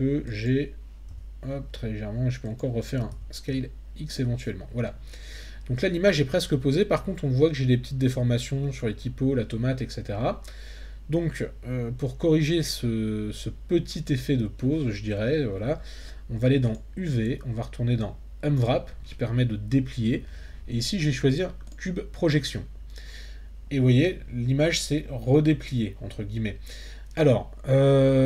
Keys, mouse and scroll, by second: 0.3 click, 1.1 g, 2.4 click, 3.1 s, 3.5 x, 4.1 click, 16.8-21.7 drag.